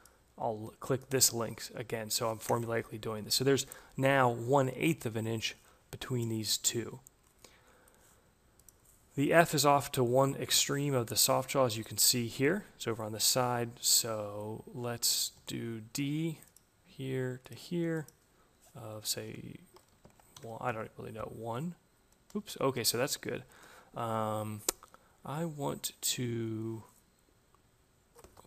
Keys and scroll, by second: 1.8 Return, 14.7 d, 19.0 1, 19.9 shift+Left, 20.2 1, 20.5 Return, 22.2 ctrl+z, 27.9 Escape.